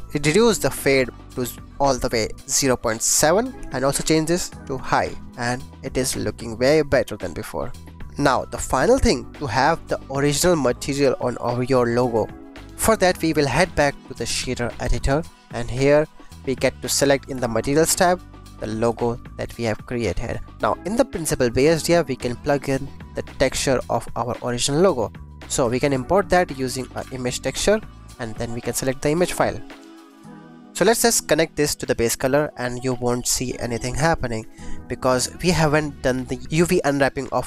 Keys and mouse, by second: 0.3-2.9 drag, 3.9 click, 5.4 click, 6.3-7.4 drag, 9.8-11.0 drag, 13.4-15.0 drag, 15.8 click, 17.5 click, 20.4 click, 25.2 click, 25.6 shift+a, 27.9 click, 29.1 click, 30.9-32.0 drag, 34.5 ctrl+s.